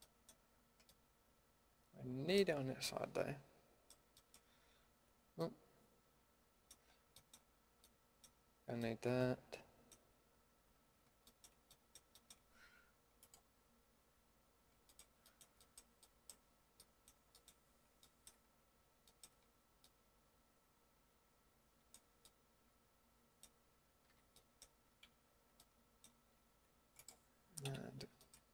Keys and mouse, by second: 5.5-7.8 middle drag, 13.2-14.8 drag, 16.2 typing, 17.7-22.3 middle drag, 22.5 middle click, 23.1-24.1 middle drag, 24.1 a, 24.4 middle click, 27.0 middle click, 27.6 KP_Decimal.